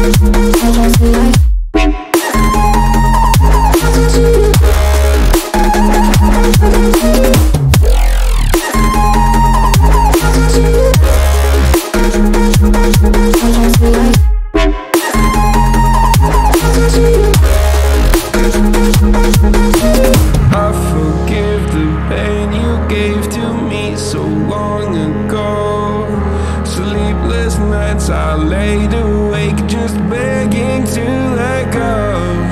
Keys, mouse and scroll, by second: 0.5-10.6 drag, 10.6-12.3 middle drag, 12.3-16.8 drag, 18.1 click, 18.6-21.1 middle drag, 21.1-23.2 drag, 31.1-32.5 drag.